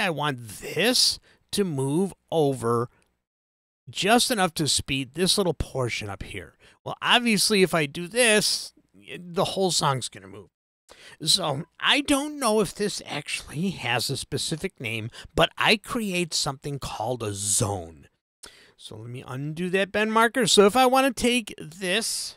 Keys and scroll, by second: 19.3 super+z.